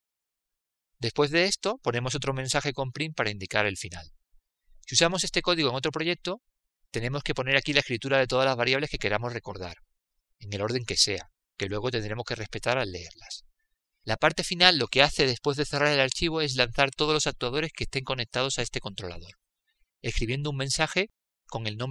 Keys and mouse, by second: 3.0-6.1 drag, 9.5-13.1 drag, 16.7-20.9 drag.